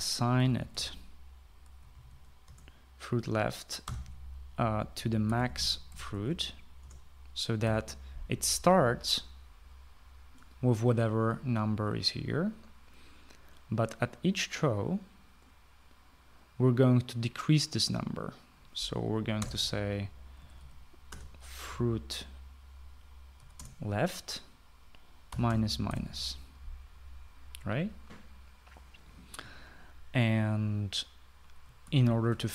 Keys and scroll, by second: 1.0-3.0 typing, 3.4 Return, 4.6-7.1 typing, 7.7 Return, 8.6 ;, 20.4 Return, 21.1-23.0 typing, 24.3 Down, 24.5 Return, 26.0-26.8 typing.